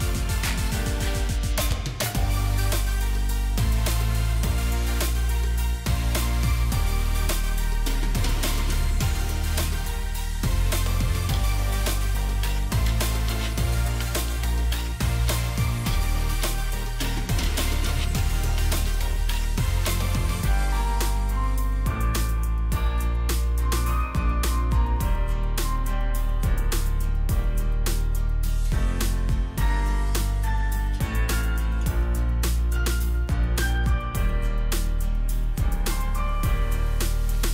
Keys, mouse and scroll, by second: 4.2 ctrl+g, 7.9 ctrl+shift+g, 9.7 shift+click, 12.9 ctrl+shift+g, 14.9 shift+click, 20.8 double click, 22.8 shift+click, 24.2 ctrl+g, 25.7 shift+click, 26.6 shift+click, 26.8 ctrl+g, 28.9 shift+click, 34.1 shift+click, 36.3 shift+click, 36.4 ctrl+g.